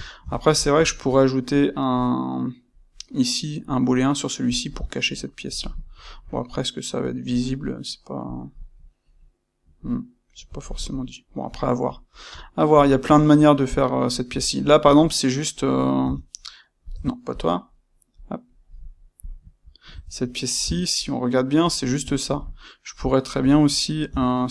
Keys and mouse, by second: 4.4 click, 5.1-8.2 middle drag, 8.2 click, 8.6-17.3 middle drag, 16.0 Tab, 16.9 Tab, 17.3 click, 18.1 click, 19.2 click, 19.8 Tab, 20.2-24.5 middle drag, 20.6 Tab, 24.0 Tab.